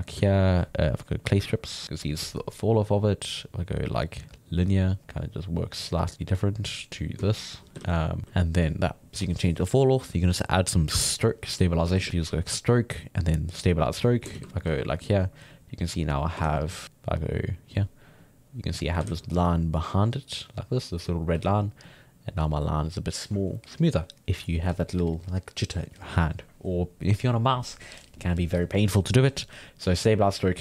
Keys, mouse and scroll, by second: 1.2-4.9 drag, 4.9 middle click, 5.0-6.1 drag, 6.1-7.3 middle drag, 7.3 ctrl+click, 7.8 ctrl+z, 7.9 middle click, 8.2 ctrl+z, 8.6-11.4 drag, 11.4 middle click, 11.9 shift+x, 12.4 click, 12.8-14.3 drag, 14.3 shift+c, 14.6 f, 15.5 click, 16.4 ctrl+z, 16.7-19.1 drag, 19.1 ctrl+z, 19.3-21.4 drag, 21.4 ctrl+z, 21.8 click, 29.9 click.